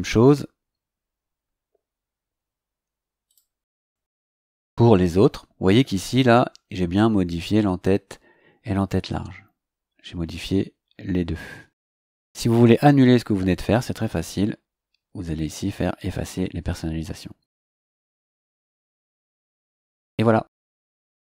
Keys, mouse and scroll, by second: 3.2 click, 14.1 click, 17.9 click.